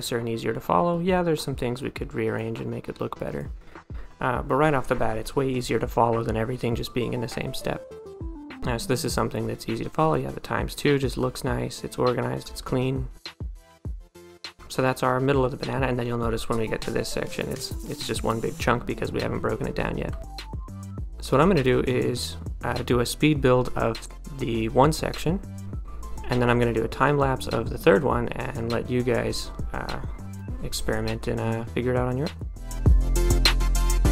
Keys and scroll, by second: 6.6 d, 20.5 d, 20.9 a, 32.6-33.3 typing.